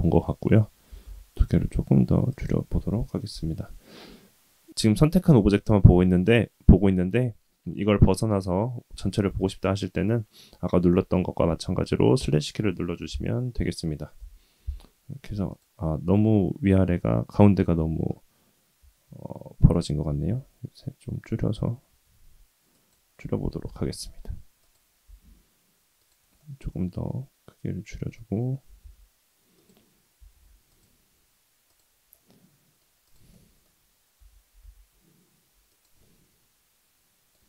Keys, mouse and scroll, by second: 0.0 Tab, 0.9 s, 14.2 KP_1, 15.5 click, 16.9-17.5 scroll up 2, 17.5-18.8 scroll down 1, 18.8 Tab, 20.1 s, 23.2 Tab, 23.6 g, 25.0 s, 26.4-28.2 middle drag, 28.6 s, 30.1 s, 31.6 click, 32.1 middle click, 33.0 click, 33.3 middle click, 34.1 r, 36.0-37.4 middle drag.